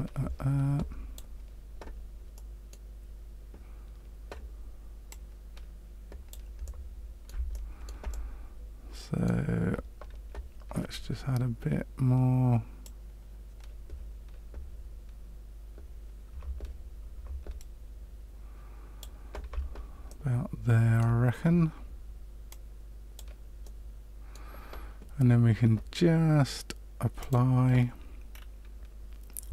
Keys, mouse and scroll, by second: 2.3 middle click, 5.0 click, 6.6 middle click, 7.5 shift+middle click, 8.0 middle click, 12.8 click, 20.0 middle click, 22.4 click, 23.6 middle click, 27.1 click, 28.3-28.7 scroll down 3.